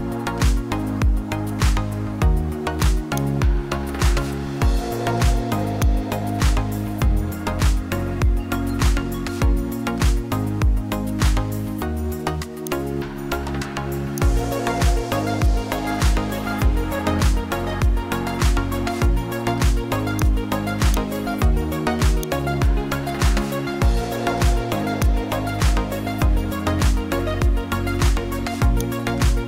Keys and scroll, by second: 8.6 ctrl+j, 10.5 ctrl+t.